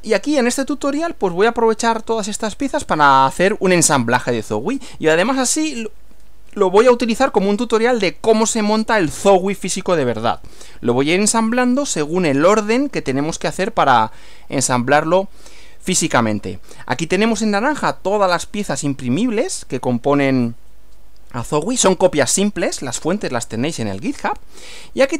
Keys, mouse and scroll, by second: 2.5-3.2 scroll up 3.